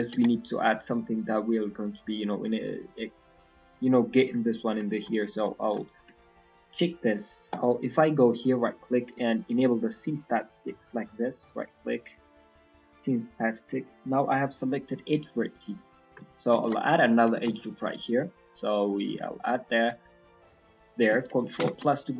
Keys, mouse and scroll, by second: 0.1 Tab, 1.0 middle click, 3.3 middle click, 3.9 middle click, 4.8 shift+middle click, 5.1-5.4 scroll up 2, 5.4 middle click, 5.8 shift+middle click, 6.0 scroll up 1, 8.4 right click, 10.6 right click, 11.5 right click, 12.1 right click, 14.9 middle click, 16.5 ctrl+r, 17.5 middle click, 19.0 click, 19.3 middle click, 21.6 ctrl+KP_Add.